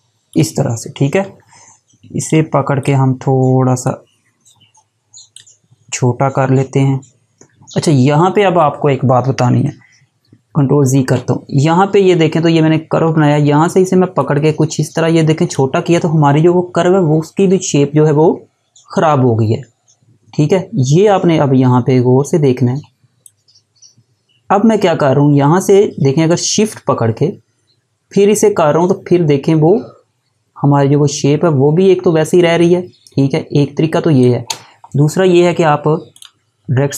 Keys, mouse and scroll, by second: 13.8 click, 22.8 click, 35.7 click.